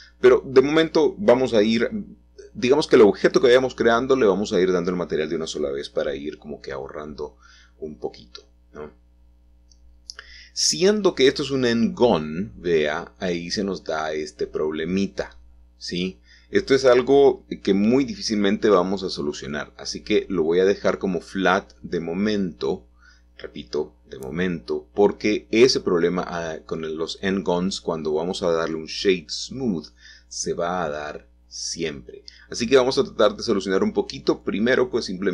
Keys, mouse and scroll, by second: 0.3 middle click, 1.5 middle click, 4.6-5.4 scroll down 2, 6.7 scroll down 2, 6.8 scroll up 2, 6.8-7.3 scroll down 2, 7.3-8.3 middle drag, 10.1-11.2 middle drag, 11.8-12.2 scroll up 1, 12.7-14.9 shift+middle drag, 15.3-16.1 scroll down 1, 18.1 click, 19.9 middle click, 22.7 middle click, 23.1 middle click, 23.3 middle click, 23.5 middle click, 25.0 middle click, 25.9-26.3 scroll up 1, 26.3 Tab, 27.2 Tab, 27.6 middle click, 29.7 click, 31.8 click, 33.2 middle click.